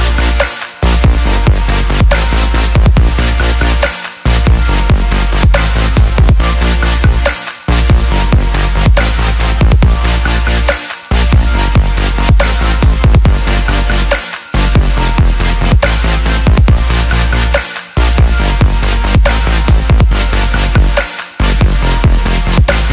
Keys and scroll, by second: 12.2-13.8 typing, 14.5 Return, 19.0-20.1 typing, 20.3 Return.